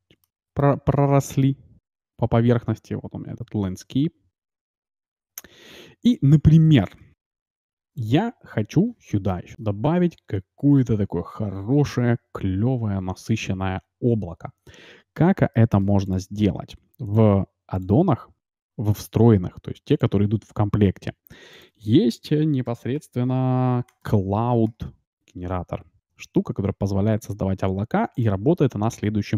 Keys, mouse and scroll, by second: 0.3-2.0 middle drag, 2.1-3.4 middle drag, 4.3 middle click, 4.8 middle click, 4.9 middle click, 6.6 shift+z, 8.8 click, 8.8 right click, 9.0 click, 9.8-14.8 middle drag, 15.2-17.9 middle drag, 16.1-18.8 drag, 28.8-29.3 middle drag.